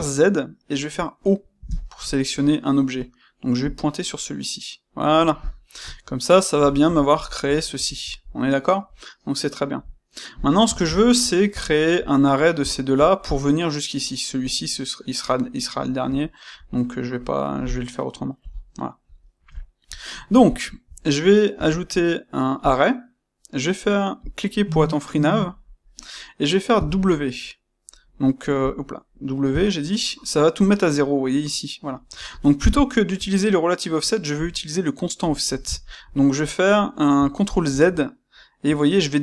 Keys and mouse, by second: 3.6 click, 5.8-10.3 middle drag, 10.3 shift+click, 10.7-21.5 ctrl+shift+middle drag, 18.3 KP_1, 21.5 space, 32.3 shift+middle click, 35.4 ctrl+middle click.